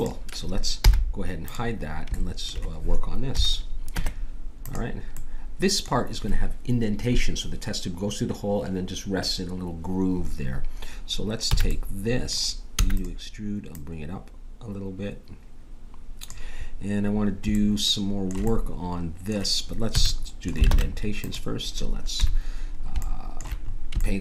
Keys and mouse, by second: 0.8 h, 3.2 middle click, 3.3 KP_7, 3.9 middle click, 4.0 Tab, 11.5 a, 11.7-12.7 middle drag, 12.7 e, 13.7-15.6 drag, 20.0 a, 20.7 ctrl+Tab, 22.1 KP_7.